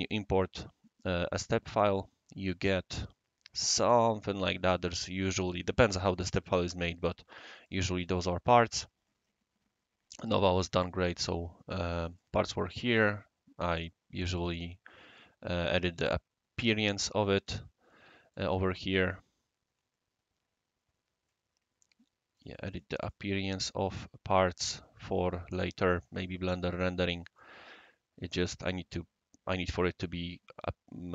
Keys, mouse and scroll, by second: 0.0-0.6 drag, 7.6 click, 8.1 click, 10.8-11.9 right drag, 12.2-13.0 right drag, 13.7 click, 14.3 click, 15.1 right click, 17.4 click, 18.3 click, 22.3 click, 22.7 click, 23.0 click, 24.2 click, 25.7 click, 26.7-27.4 right drag, 27.6 scroll up 1, 27.6 scroll down 1, 28.0-28.4 scroll up 2, 29.0-30.6 scroll up 1.